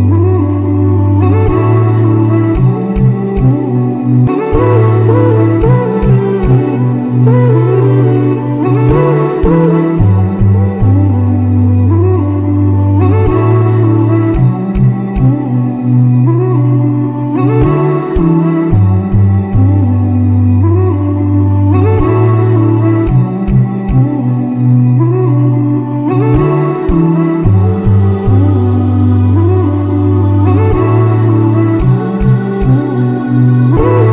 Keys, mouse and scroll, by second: 0.3 middle click, 0.9 Tab, 1.3 KP_7, 2.6 click, 3.3-4.4 scroll up 4, 4.4 g, 6.5 click, 7.1 g, 8.4 click, 9.1 g, 11.5 ctrl+z, 12.9 g, 15.2 click, 16.0 g, 17.6 click, 18.3 g, 20.0 a, 20.3-23.5 right drag, 26.5 Tab, 26.9-30.0 right drag, 30.8-32.0 scroll up 1, 32.0-33.4 scroll up 2, 33.4 click.